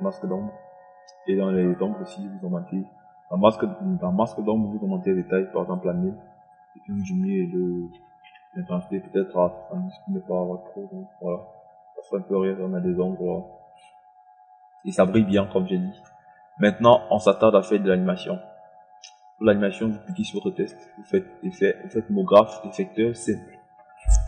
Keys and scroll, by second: 8.5 KP_7, 9.0 KP_0.